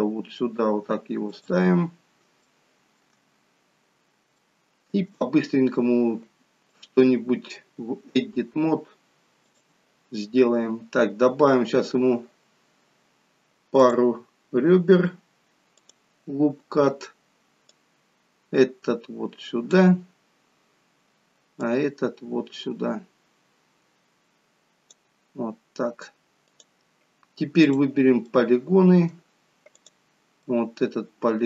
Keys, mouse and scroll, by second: 2.5 shift+middle click, 3.2-3.8 scroll down 2, 3.8-4.2 scroll down 4, 4.3 shift+middle click, 6.6 click, 14.0 click, 17.8 click, 21.6 click, 26.4 click, 28.3 click, 28.5 middle click, 29.8 click, 30.4 middle click.